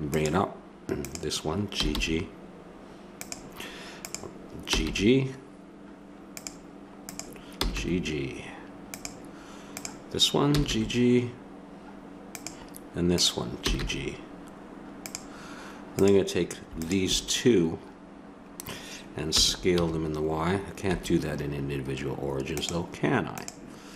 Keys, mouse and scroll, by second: 1.7 g, 4.6 g, 7.6 g, 10.6 g, 11.6 click, 13.6 g, 14.9 click, 19.3 s.